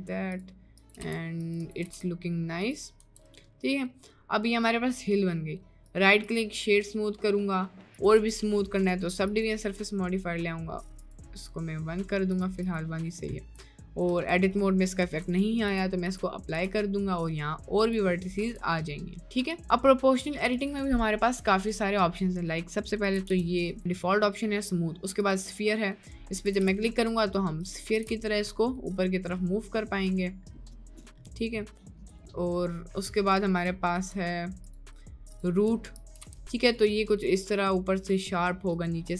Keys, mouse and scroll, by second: 1.0 g, 1.9 g, 3.2 Tab, 3.4 middle click, 4.2 middle click, 5.4 middle click, 5.8 right click, 7.0 middle click, 7.9-9.6 drag, 11.0 click, 12.6 click, 13.5 middle click, 14.1 Tab, 15.0 Tab, 15.7-16.1 drag, 16.6 Tab, 16.9 middle click, 17.9 click, 18.2 middle click, 18.4 Tab, 18.8 middle click, 19.5 Tab, 20.6-22.2 drag, 23.2 g, 23.8-26.1 drag, 26.7 g, 28.1 g, 30.7 g, 32.6 middle click, 32.9 middle click, 33.3 Tab, 34.0 Tab, 34.8-36.1 drag, 36.3 g.